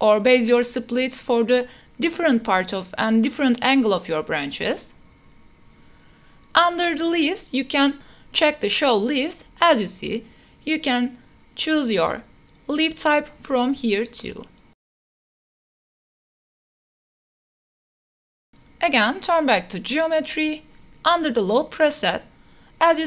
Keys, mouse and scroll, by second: 0.1 click, 1.3-5.6 drag, 5.9-9.3 drag, 10.3 drag, 11.2-11.8 drag, 12.3-12.9 drag, 13.3-13.9 drag, 14.3 click, 14.9-18.3 drag, 19.1 click.